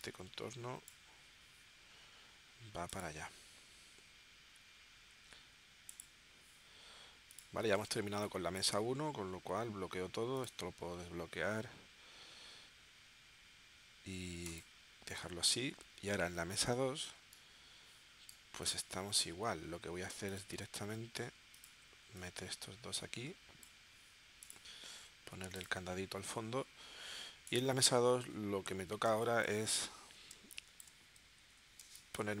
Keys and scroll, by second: 7.9 space, 29.1 space, 30.3 space, 31.8 space.